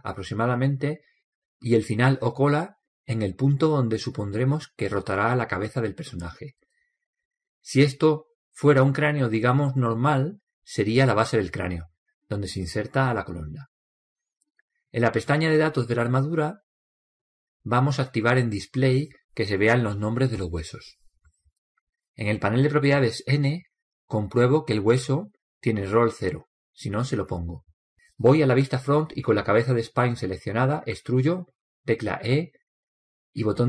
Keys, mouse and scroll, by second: 2.5-4.4 right drag, 3.6 click, 5.8 click, 19.4 click, 24.9 n, 29.7 KP_1.